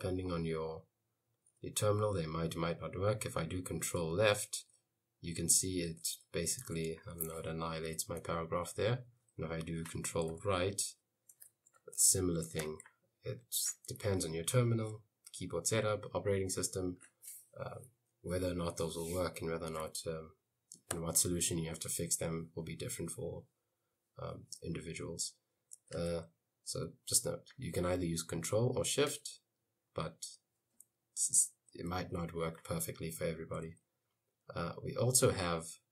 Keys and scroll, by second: 4.1 ctrl+Left, 6.9 Escape, 8.0 u, 8.6 l, 9.1 i, 10.4 ctrl+Right, 11.2-12.7 typing, 12.6 Escape, 14.1 l, 21.1 i.